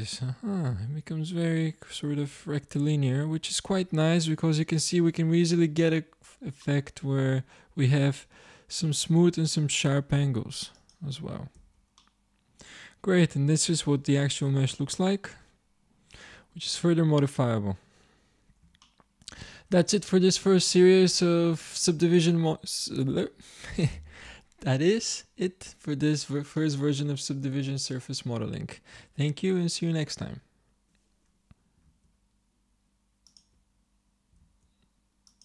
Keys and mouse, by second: 6.7-8.3 middle drag, 10.7 click, 11.6 z, 12.0 click, 16.7-18.9 middle drag.